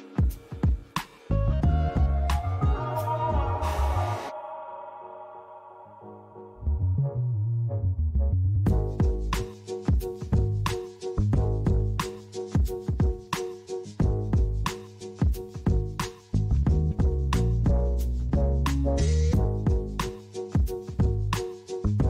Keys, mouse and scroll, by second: 1.4 click, 2.3 click, 2.6 right click, 3.8 click, 5.9 click, 8.2 click, 9.5 click, 12.0 click, 13.9 click, 15.2 click, 17.7 click, 18.6 click, 19.9 click.